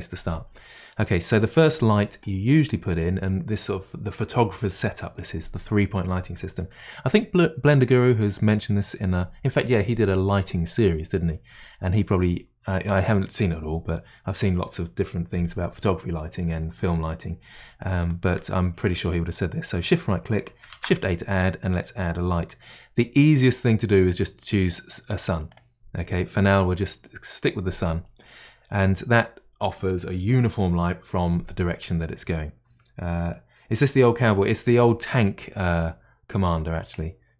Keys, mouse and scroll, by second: 18.1 shift+right click, 32.8-35.8 middle drag.